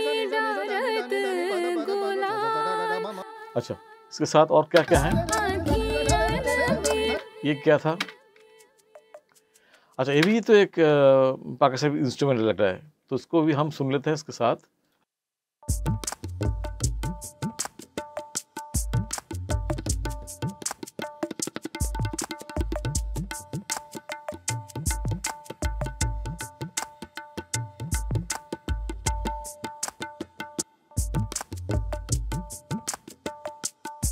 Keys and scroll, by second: 3.1 space, 4.8 space, 7.1 space, 10.2 space, 15.5 space, 30.5 space.